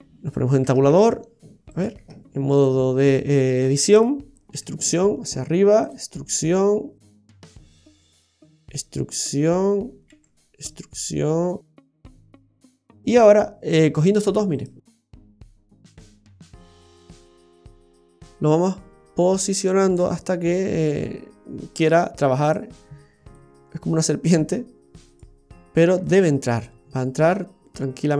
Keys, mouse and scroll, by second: 0.7 Tab, 0.9 d, 1.7 right click, 2.0 Tab, 2.6 right click, 4.5 e, 6.0 e, 7.2 middle click, 8.6 e, 12.7-13.6 scroll up 10, 14.5 shift+right click, 14.9-15.8 scroll down 5, 16.4 click, 16.9 click, 18.0 click, 20.2 middle click, 22.4 right click, 23.3 click, 25.1 right click, 26.0 shift+right click, 26.6 click.